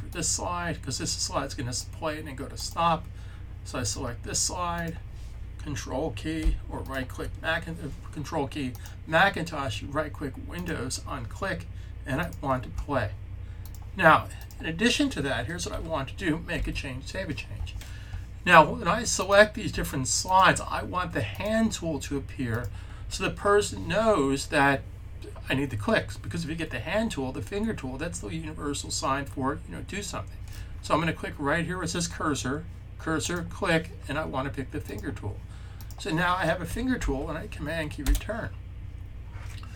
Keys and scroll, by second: 16.4 super+s, 36.8 super+s.